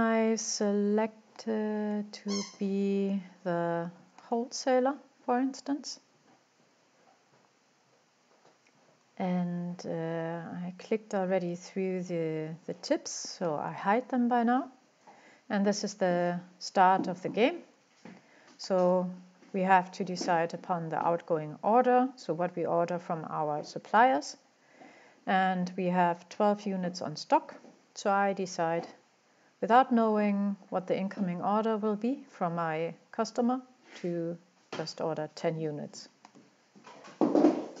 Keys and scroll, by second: 28.4-28.8 typing.